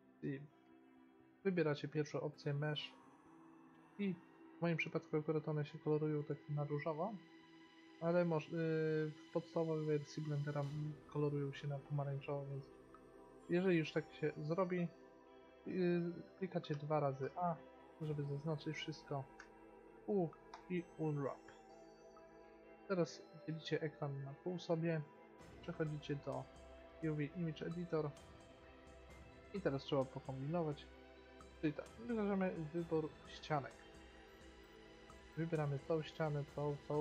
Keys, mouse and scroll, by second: 3.7-5.0 middle drag, 8.0-11.4 middle drag, 16.8 a, 17.4 a, 19.5 u, 22.2-24.1 drag, 25.5-27.3 drag, 31.2 middle click, 32.8-34.8 drag, 34.8-37.0 middle drag.